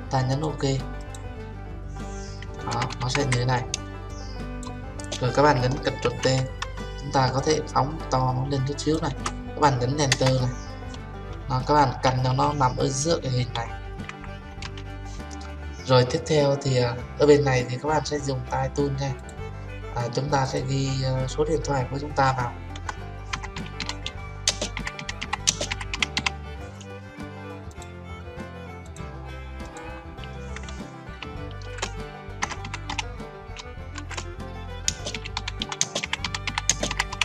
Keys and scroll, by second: 6.1 ctrl+t, 10.2 Return.